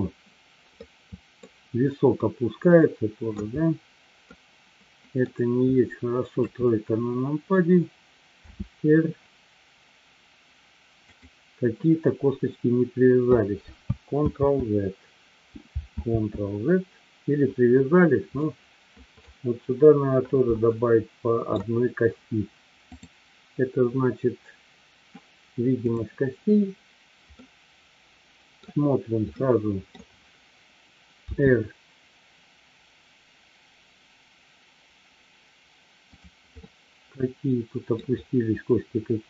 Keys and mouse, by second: 0.7-1.5 middle drag, 2.2-3.5 middle drag, 4.2-5.2 middle drag, 6.3 KP_3, 8.7 r, 14.7 ctrl+z, 16.5 ctrl+z, 18.3-19.2 middle drag, 20.8-21.5 middle drag, 22.8-25.1 drag, 25.8 click, 27.3-28.7 middle drag, 29.5 middle click, 36.5 click, 36.6-38.0 middle drag.